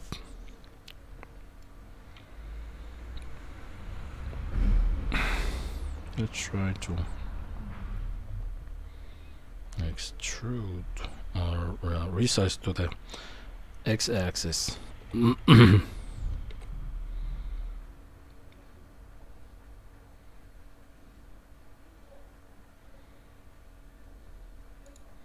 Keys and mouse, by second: 1.6-5.3 middle drag, 5.9 s, 12.8 middle click, 15.0 g.